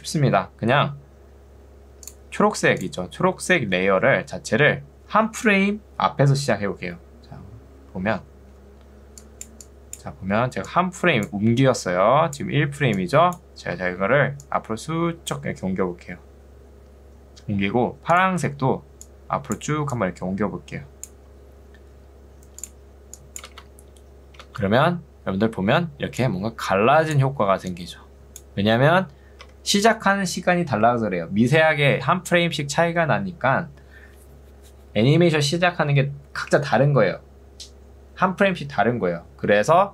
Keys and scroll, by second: 4.2 ctrl+2, 6.6 Escape, 11.8 ctrl+2, 13.8 Escape, 23.6 space, 27.6 ctrl+2, 29.6 Escape.